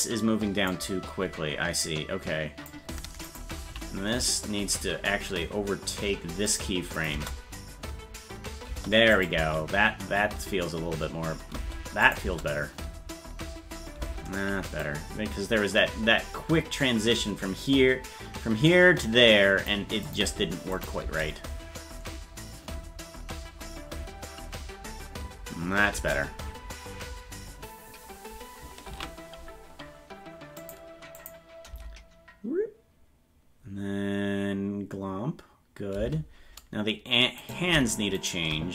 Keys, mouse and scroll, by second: 1.8 click, 3.3 right click, 3.7 g, 7.0 click, 7.1 space, 9.2 click, 9.4 space, 12.1 click, 12.2 space, 14.8-19.7 drag, 14.8 space, 20.1 click, 20.8 click, 21.0 space, 29.1 ctrl+s, 30.6 click, 31.2 click, 31.7 space, 36.2 space, 37.5 right click, 38.2 shift+right click.